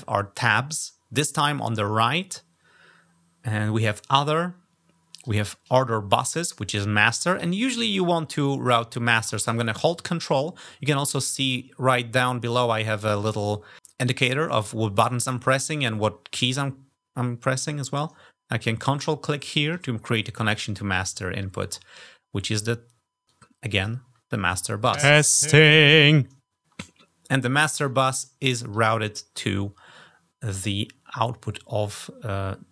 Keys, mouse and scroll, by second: 5.0 click, 18.8 ctrl+click, 23.1 click, 24.2 click.